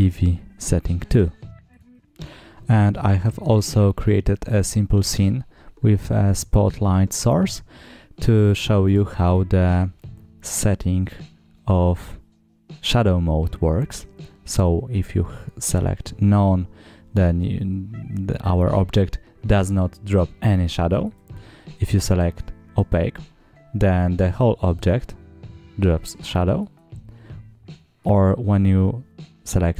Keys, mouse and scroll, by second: 1.6 click, 1.9 middle click, 3.6 scroll down 1, 4.5 scroll down 1, 5.7 click, 7.0-7.4 scroll up 3, 9.1 click, 10.2-11.6 scroll down 9, 17.2 scroll up 2, 20.9-21.8 drag, 22.5 scroll down 2, 26.4-28.2 drag.